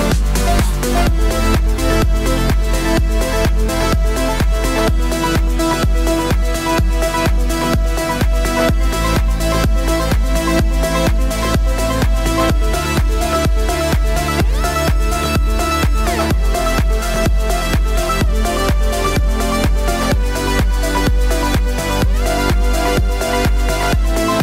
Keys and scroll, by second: 6.1 v.